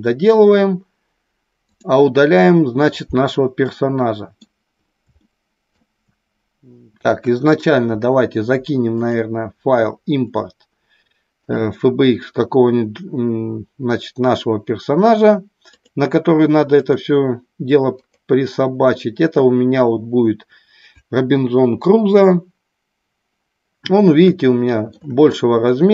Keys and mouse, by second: 1.6 click, 3.6 middle click, 5.1-5.7 shift+middle drag, 7.1 KP_1, 9.0-11.8 drag, 24.3-24.9 shift+middle drag.